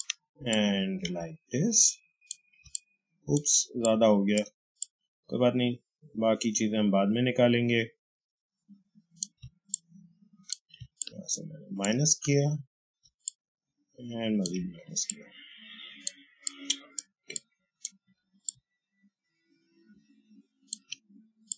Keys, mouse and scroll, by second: 2.5 space, 2.6 click, 3.0 space, 4.7-9.3 drag, 9.3 space, 9.6 click, 9.8 space, 10.9-13.2 alt+drag, 13.2-14.8 alt+drag, 14.8 space, 15.0 click, 15.2 space, 16.3 click, 16.4 space, 17.2 click, 17.4 space, 18.4-21.5 alt+drag.